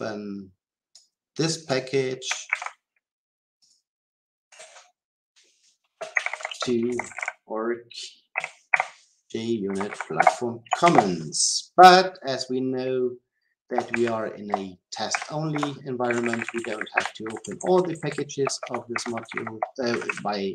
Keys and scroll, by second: 2.5 ctrl+c, 10.1 Return, 15.1 Delete.